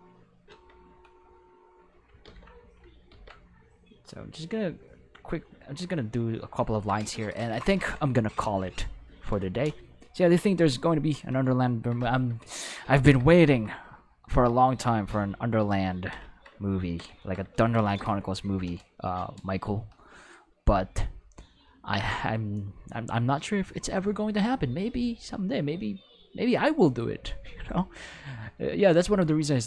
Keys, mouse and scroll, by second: 1.5 click, 2.2 ctrl+z, 3.1 ctrl+z, 3.6-4.9 drag, 5.7 click, 6.7 ctrl+middle click, 15.1 shift+middle click, 15.5 shift+middle click, 21.5 click, 24.8 click, 26.5 click.